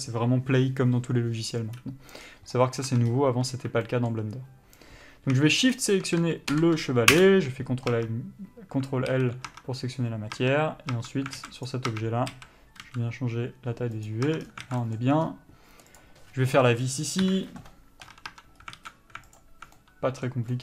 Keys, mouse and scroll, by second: 2.5 scroll down 1, 2.8 middle click, 3.2 Tab, 3.3 scroll up 1, 3.8-4.1 scroll down 1, 4.1 shift+middle click, 6.0 shift+click, 7.4 ctrl+l, 8.2 Tab, 9.3 alt+a, 9.8 Tab, 11.6 alt+a, 11.9 click, 12.2 Tab, 12.6 a, 13.2 s, 14.6 Tab, 14.7 scroll down 1, 14.9 alt+a, 15.1 middle click, 15.4 scroll up 1, 16.2 click, 17.5 KP_Divide, 18.5 Tab, 18.8 scroll up 1, 19.0 alt+a, 19.6 alt+click, 20.0 middle click.